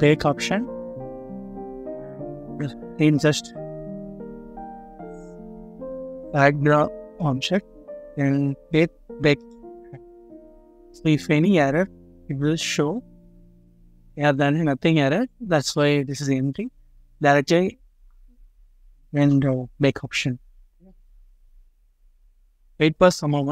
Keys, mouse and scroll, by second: 6.2 double click.